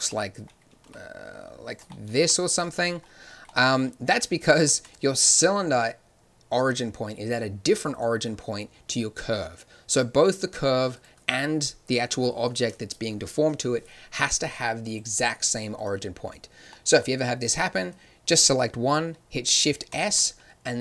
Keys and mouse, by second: 0.0-2.9 drag, 0.8 g, 2.1 g, 7.9-12.8 drag, 14.8-18.9 drag, 18.9 middle click, 19.8 shift+s.